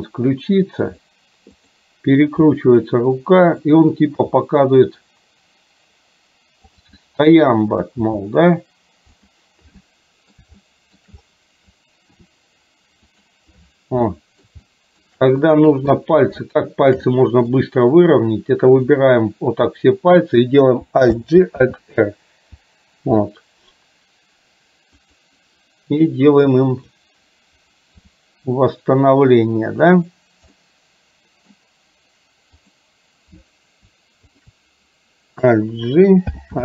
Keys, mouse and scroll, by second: 2.5 r, 4.2 g, 7.0 scroll up 1, 7.2-8.0 middle drag, 8.2 g, 9.8 scroll up 1, 9.9-10.4 middle drag, 10.4 scroll down 1, 10.7 shift+scroll up 1, 10.8 shift+middle drag, 12.2 r, 14.2 middle drag, 14.8-15.2 shift+middle drag, 15.5 middle click, 16.0 middle click, 16.5-16.9 shift+middle drag, 17.2 middle click, 18.4 click, 21.2 alt+g, 21.8 alt+r, 25.2 click, 26.3 click, 28.2 r, 30.7-31.7 middle drag, 32.7 click, 36.4 alt+g.